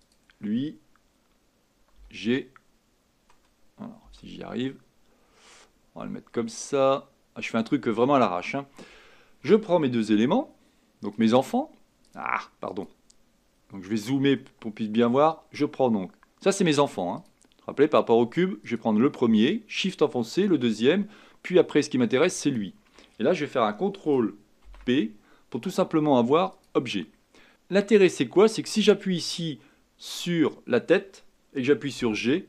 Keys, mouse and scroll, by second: 0.1 click, 4.1 g, 11.2 shift+click, 12.1 click, 12.8 click, 13.5-14.4 scroll up 5, 14.4-17.2 shift+middle drag, 17.2 click, 18.7 click, 20.4 shift+click, 22.5 shift+click, 26.6 ctrl+p, 27.1-28.5 scroll down 5, 27.3 g, 29.3 click, 32.0 g.